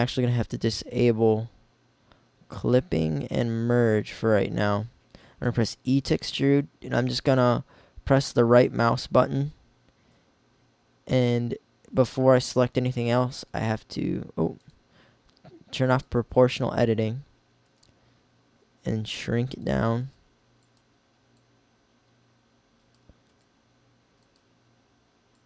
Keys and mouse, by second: 0.5-1.7 drag, 3.1-4.5 drag, 5.1 e, 13.4 s, 14.7-15.9 drag, 15.9-17.5 middle drag, 17.8 s, 19.4-20.7 drag, 19.9 s, 23.3 s, 24.4-25.4 drag.